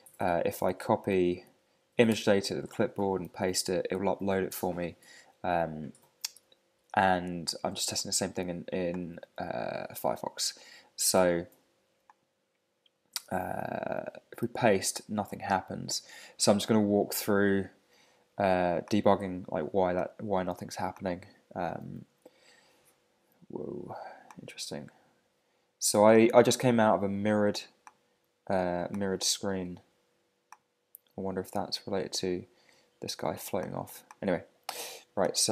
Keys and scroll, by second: 0.2 super+Tab, 2.1 super+c, 2.6 super+Tab, 3.2 super+v, 6.8 super+Tab, 14.4 super+v, 29.4 super+0, 32.4 super+=.